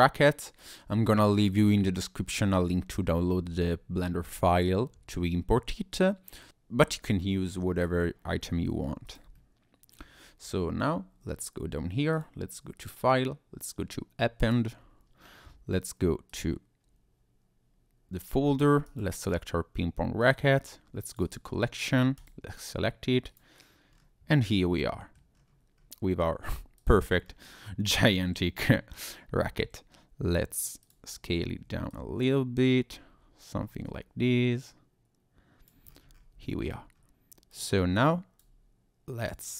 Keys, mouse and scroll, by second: 0.6-1.0 scroll down 1, 5.3-6.0 scroll down 2, 6.0 middle click, 7.4 middle click, 8.4 shift+middle click, 9.1 click, 9.3 middle click, 10.4 scroll down 1, 12.1 click, 23.9-24.3 scroll down 2, 24.3 middle click, 25.3 scroll down 1, 25.7-26.4 scroll up 1, 26.8 click, 27.2 scroll up 1, 27.4-28.3 scroll down 2, 29.4 s, 30.8 click, 31.9 click, 33.4 click, 35.9-36.4 scroll up 5, 36.4 shift+middle click, 36.9-37.5 scroll up 1, 37.5 click, 39.2 click.